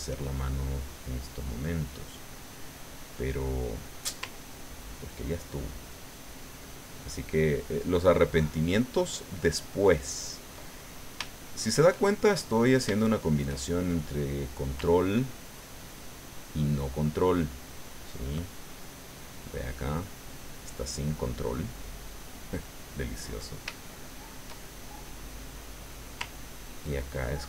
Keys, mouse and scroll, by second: 0.4-4.1 shift+middle drag, 4.5-7.7 ctrl+drag, 11.0 shift+click, 12.4 click, 13.0 shift+click, 14.0 click, 14.9-18.4 ctrl+drag, 18.4-21.4 ctrl+drag, 21.4 middle click, 22.3 middle click, 23.1 middle click, 24.7-26.1 shift+middle drag, 26.4-27.4 ctrl+drag.